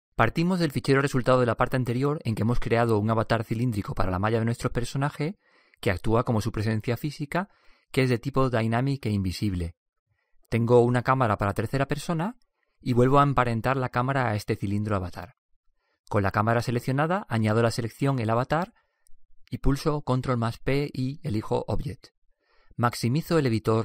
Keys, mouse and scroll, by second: 4.7-6.6 right drag, 8.3-17.5 right drag, 19.4 ctrl+p.